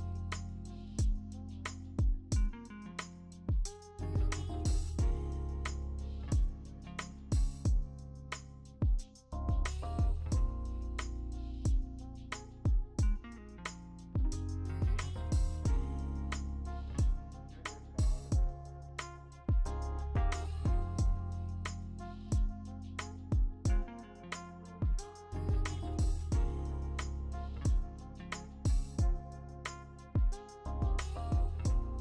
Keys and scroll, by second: 0.2 scroll down 19, 1.6 ctrl+t, 2.8 v, 5.1 w, 7.5 v, 19.3 ctrl+alt+f, 20.1-21.0 typing, 22.9 0, 24.2 ctrl+z, 28.6-31.3 typing.